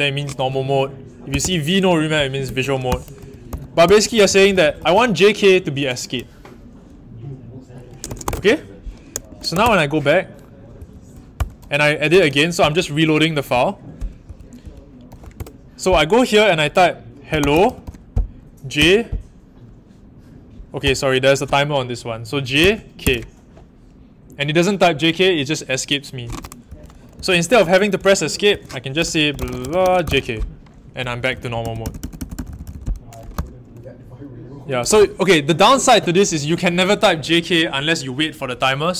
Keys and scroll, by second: 1.0-1.8 typing, 7.8-10.0 typing, 10.7 Up, 11.3 Return, 12.2-15.5 typing, 17.0-18.7 typing, 20.8 BackSpace, 22.3-23.5 typing, 26.4-33.2 typing, 28.5 Escape, 34.8 shift+a.